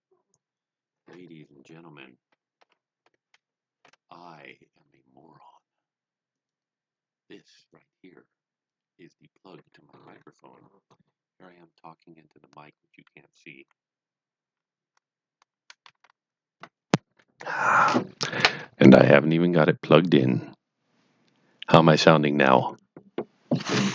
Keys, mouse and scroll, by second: 6.3 click.